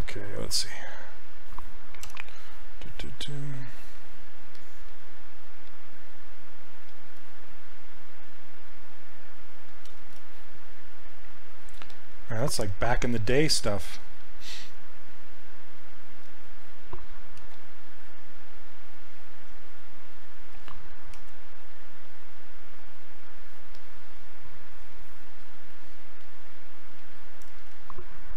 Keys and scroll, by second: 17.5 r, 21.2 w.